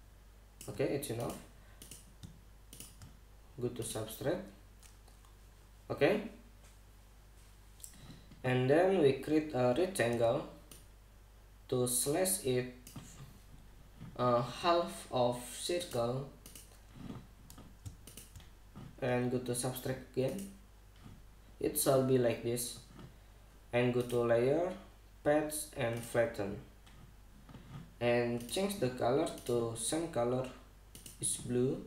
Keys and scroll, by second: 10.8 r.